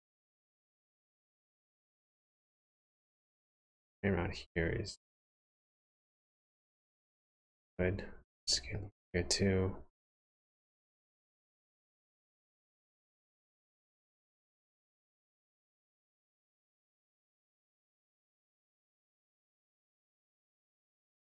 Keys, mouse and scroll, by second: 10.8-11.6 scroll up 5, 11.3 shift+middle click, 15.3 alt+click, 16.3-17.1 scroll down 3, 17.1 s.